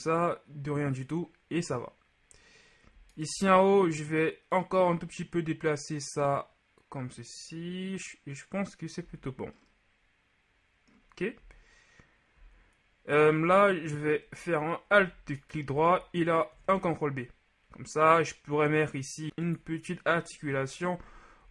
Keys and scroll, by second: 9.1 z, 16.5 ctrl+alt+b, 20.6 KP_3, 21.4 z.